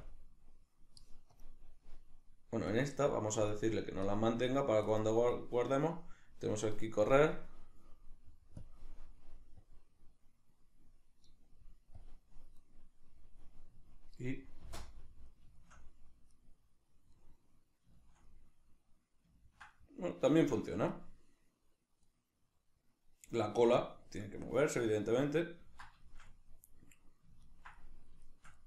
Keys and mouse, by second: 3.5 click, 8.6 click, 9.6-14.3 drag, 14.3-17.8 middle drag, 14.6 space, 20.3 shift+middle click, 25.8-28.6 shift+middle drag.